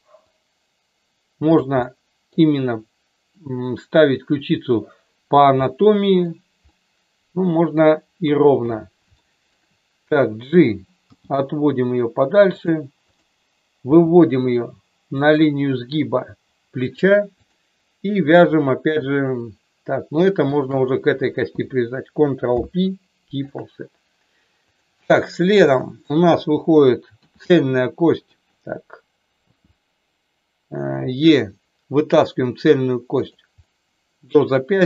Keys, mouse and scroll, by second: 0.3-1.6 drag, 1.8 middle click, 5.5 middle click, 6.5-7.7 middle drag, 8.2 KP_1, 9.2 shift+middle click, 11.1 g, 12.4 click, 13.9 g, 15.2 click, 17.4 click, 20.4 shift+click, 22.4 ctrl+p, 24.7 click, 25.6 shift+middle click, 27.3 r, 28.0 click, 31.0 e, 33.2 click, 33.6 middle click.